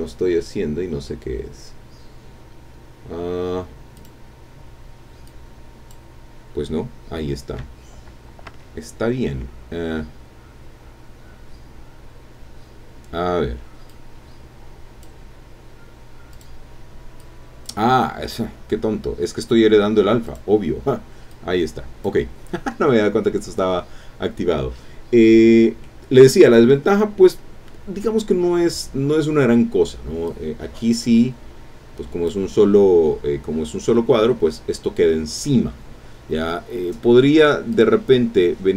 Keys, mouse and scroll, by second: 3.9 click, 5.2 click, 8.5 Escape, 13.9-15.2 drag, 16.3 click, 17.2 click, 20.2 click, 21.3 click, 24.8-25.2 scroll up 2, 25.3-25.8 scroll down 3, 25.8 click, 30.3-32.5 drag, 34.1-34.7 scroll up 2, 36.8 scroll down 2, 37.7 click.